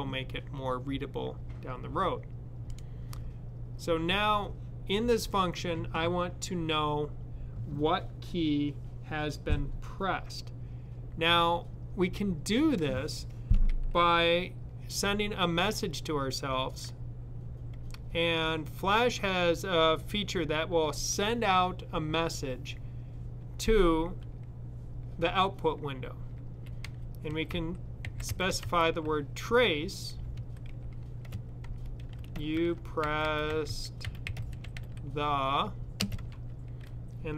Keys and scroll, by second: 27.1-28.8 typing, 30.0 typing, 31.7-36.0 typing.